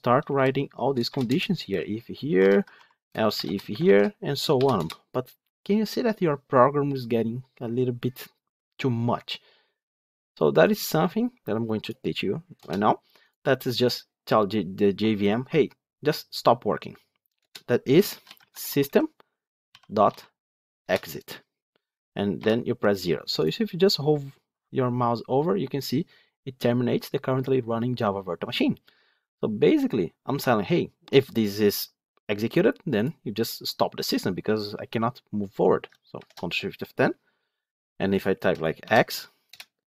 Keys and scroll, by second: 20.7 Return, 36.1 ctrl+shift+F10.